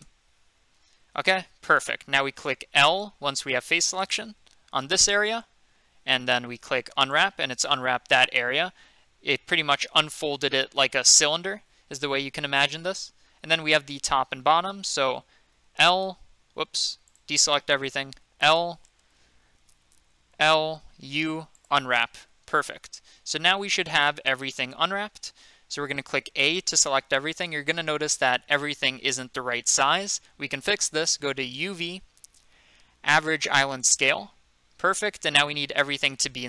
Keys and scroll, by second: 0.0 Return, 2.9 3, 4.8 i, 6.6 u, 15.5 l, 18.1 l, 20.3-21.5 typing, 26.3 a.